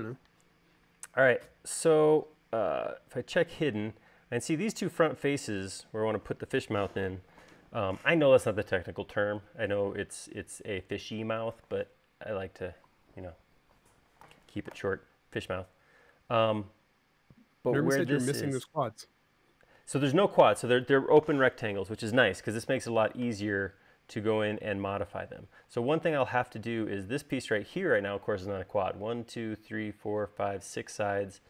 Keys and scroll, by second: 25.7 l, 27.0 space, 31.3 l.